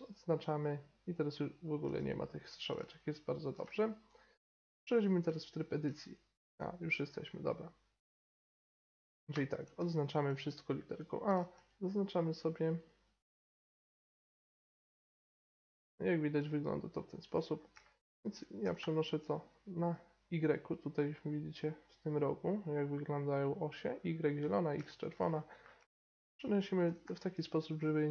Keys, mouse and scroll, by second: 0.0-1.8 drag, 1.8 n, 5.3 Tab, 9.8 a, 10.8-15.0 right drag, 13.9 b, 15.2 g, 18.6 g, 24.9 middle click, 25.3 middle click, 26.8 g.